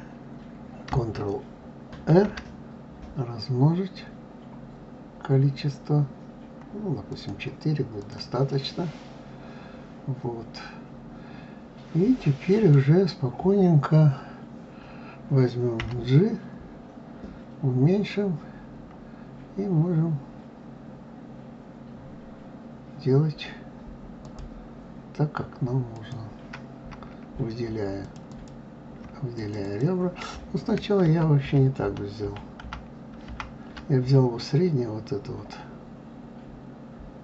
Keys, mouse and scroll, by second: 1.8 ctrl+r, 8.3-11.3 middle drag, 25.7 click, 27.8 shift+click, 28.1 shift+click, 29.1 click, 29.4 click, 30.8 ctrl+z, 31.2 ctrl+z, 32.0 ctrl+z, 32.4 ctrl+z.